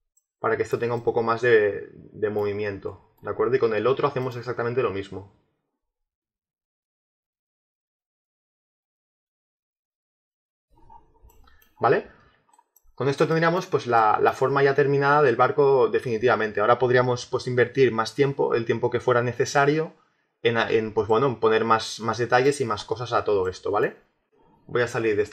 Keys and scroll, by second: 6.5 ctrl+z, 9.0-10.6 typing, 9.1 Return.